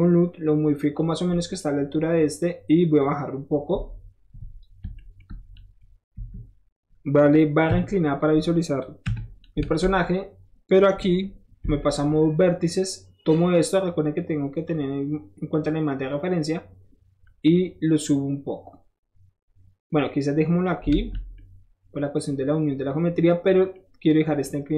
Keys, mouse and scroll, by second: 1.0 click, 3.0-4.6 drag, 5.0 shift+middle click, 6.1 KP_1, 9.0 KP_1, 9.6 alt+z, 10.1 scroll up 1, 11.6 1, 12.4 click, 14.7-20.7 drag, 21.4-24.7 middle drag.